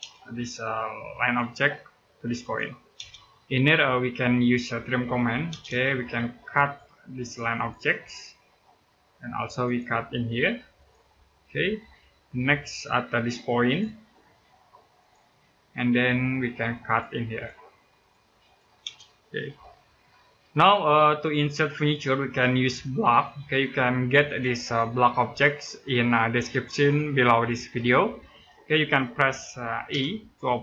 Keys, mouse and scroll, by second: 1.0 click, 2.7 space, 3.3 scroll up 1, 4.0 middle click, 4.6-5.4 typing, 5.9-6.4 scroll up 1, 6.4 click, 8.1-8.4 scroll down 1, 8.4 middle click, 8.8-9.4 scroll up 1, 9.4 click, 10.9-11.3 scroll down 1, 11.3 middle click, 11.9-12.5 scroll up 1, 12.9 click, 15.1 scroll down 1, 15.3 middle click, 15.7-16.6 scroll up 1, 16.6 click, 18.6 space, 18.8-19.2 scroll down 1, 19.3 middle click, 21.3-21.8 scroll down 1, 21.8 middle click, 22.9 scroll up 1, 23.5 middle click, 29.7 typing.